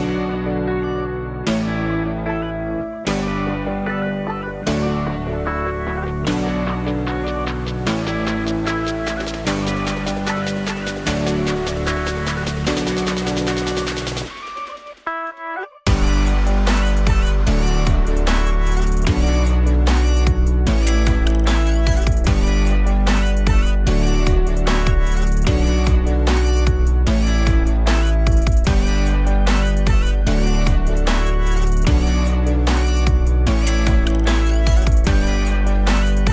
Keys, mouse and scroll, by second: 0.4 Tab, 0.9-1.3 alt+drag, 1.3 z, 1.8-2.6 alt+drag, 2.6 scroll down 1, 2.9 click, 3.3 click, 3.9 scroll up 1, 5.6 KP_Divide, 7.0 KP_1, 7.7-8.1 scroll up 4, 8.1-8.7 alt+middle drag, 8.7-9.3 alt+drag, 9.3-9.6 scroll down 5, 9.6-10.0 alt+drag, 10.0 Tab, 10.3 alt+middle click, 11.0 click, 12.3 click, 17.9 Tab, 18.1-19.5 alt+drag, 19.5 ctrl+z, 20.2 alt+click, 20.7 scroll up 1, 22.0 KP_1, 22.7-23.1 scroll up 2, 23.1 alt+middle click, 23.5 scroll up 2, 23.9 z, 24.8 click, 25.3 1, 26.4 click, 28.3 g, 30.2 click, 31.3 g, 33.6 click, 35.0 g.